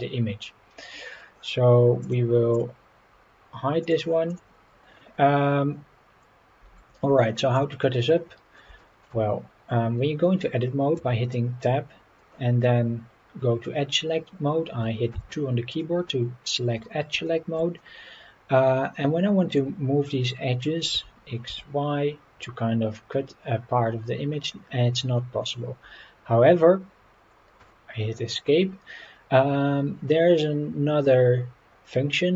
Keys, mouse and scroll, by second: 0.3-0.6 scroll up 1, 0.7 scroll down 1, 2.0 click, 2.5 click, 3.8 click, 4.3 click, 5.6-6.0 scroll up 3, 7.3 shift+middle drag, 7.8-8.6 middle drag, 8.8 shift+middle drag, 11.0 Tab, 15.7 click, 17.2-17.5 shift+middle drag, 17.8-19.6 middle drag, 20.9 g.